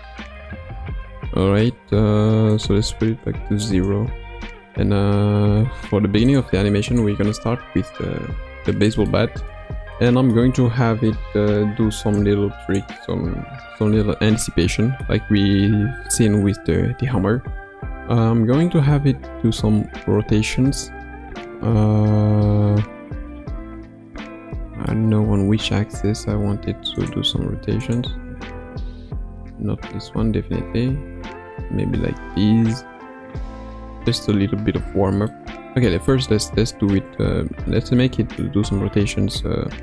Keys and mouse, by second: 2.6-3.7 drag, 6.2-8.2 drag, 8.2 KP_Decimal, 9.1-10.4 middle drag, 12.2 click, 14.4-15.1 shift+middle drag, 17.5 ctrl+s, 21.4-24.9 middle drag, 27.4 ctrl+Tab, 27.8 click, 28.5 r, 30.8 r, 35.3-35.8 middle drag, 36.2 middle click, 38.0 middle click.